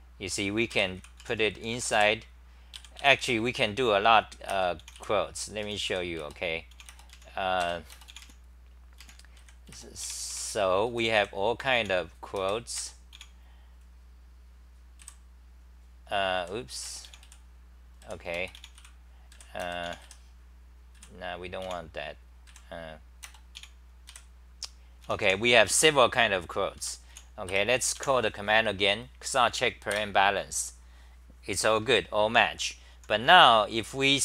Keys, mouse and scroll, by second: 0.0-2.7 typing, 5.4-6.3 typing, 7.6 ctrl+g, 9.0 n, 9.4 l, 10.9 n, 11.1 l, 11.7 e, 12.4 ctrl+g, 16.4 f, 18.0 f, 19.3 f, 20.9 f, 21.6 e, 22.5 f, 24.8-25.7 typing, 26.8 Home, 27.1 t, 27.5 Return, 28.0 a, 29.9 Return, 32.9-34.2 typing.